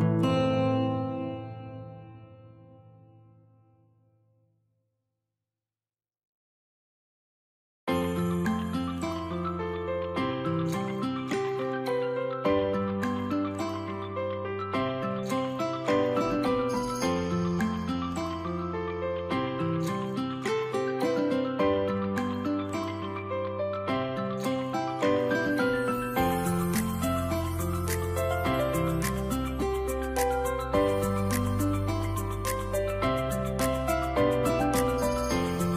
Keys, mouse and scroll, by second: 6.8 middle click, 7.4 scroll down 1, 7.8 shift+middle click, 8.0 scroll up 2, 8.5 alt+click, 15.3 middle click, 16.9 alt+click, 25.9 shift+middle click, 26.7 scroll up 1, 26.9 alt+click.